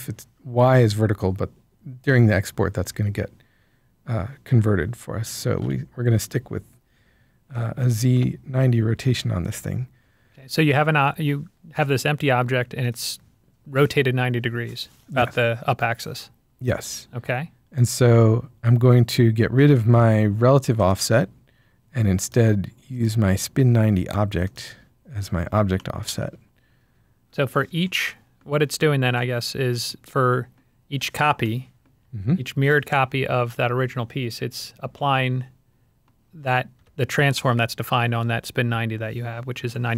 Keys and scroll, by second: 5.5 typing, 8.1 Return, 8.1 typing, 38.7 1.